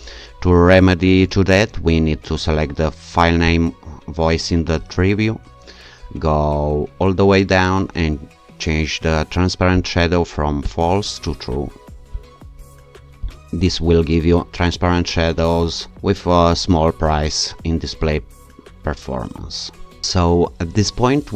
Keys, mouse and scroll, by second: 3.5 click, 6.1-7.3 scroll down 2, 9.8 click, 12.2 click, 13.3 click.